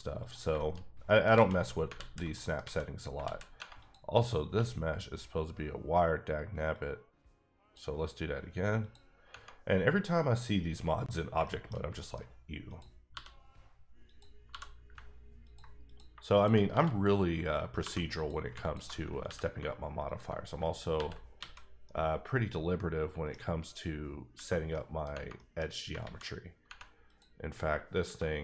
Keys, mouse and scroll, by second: 0.2 click, 0.5 shift+click, 0.6 shift+middle click, 0.7-1.1 shift+scroll down 2, 1.1 middle click, 1.3 alt+a, 1.9 alt+z, 2.3 middle click, 2.6 a, 3.2 alt+z, 3.8 click, 4.4 q, 6.7 click, 8.8 click, 10.9-11.3 scroll up 1, 11.4 shift+middle click, 11.9 middle click, 12.6 click, 13.2 f, 14.0 click, 14.5 g, 15.4 click, 16.7 f, 17.8 2, 18.1 click, 19.2 ctrl+x, 20.0 alt+click, 20.9 ctrl+x, 21.4 a, 21.8 middle click, 23.7-24.2 scroll up 1, 24.2 scroll down 1, 24.7 middle click, 25.3 middle click, 26.0 alt+a, 27.0 click.